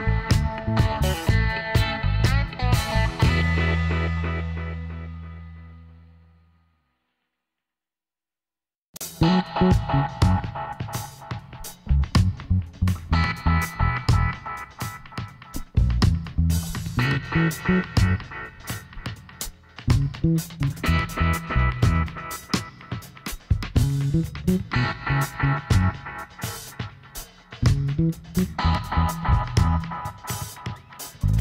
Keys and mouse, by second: 0.9-2.4 middle drag, 1.6 ctrl+r, 3.5-5.4 drag, 5.4 s, 8.1 ctrl+r, 9.9-12.0 drag, 12.5 click, 12.6-15.3 middle drag, 14.5 z, 15.7-17.5 drag, 16.4-17.5 right drag, 16.7 KP_1, 19.7 g, 22.7 s, 26.5-28.7 drag, 28.7 e, 31.0 s.